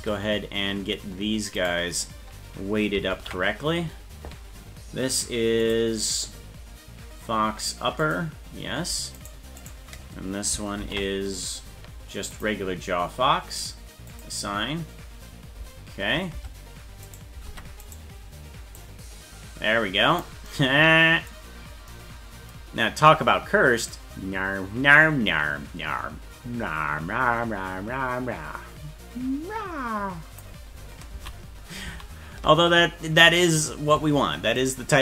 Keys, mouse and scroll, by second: 0.0 Tab, 1.6 right click, 3.1 ctrl+l, 5.6 click, 8.0 click, 9.2 right click, 10.8 ctrl+l, 12.3 click, 14.1 click, 16.3 Tab, 17.1 right click, 17.5 ctrl+Tab, 17.9 right click, 18.8-20.3 drag, 21.5-21.9 scroll down 5, 23.9-30.4 drag, 31.2 ctrl+z, 32.0 ctrl+z, 32.8 scroll up 4, 34.6 right click.